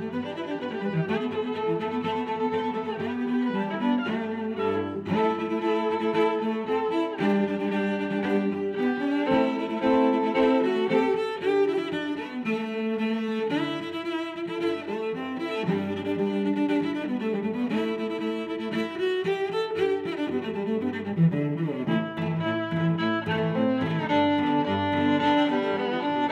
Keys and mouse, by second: 0.0 click, 0.5 r, 3.4 click, 4.3 Tab, 4.6 middle click, 5.5 click, 5.7 Tab, 6.2 a, 6.8 click, 8.1 g, 8.3 y, 10.3 click, 10.5 Tab, 11.0 click, 11.3 middle click, 12.8 click, 13.0 Tab, 13.4 a, 13.7 s, 15.6 click, 16.8 middle click, 17.6 s, 21.0 click, 21.3 middle click, 23.5 Tab.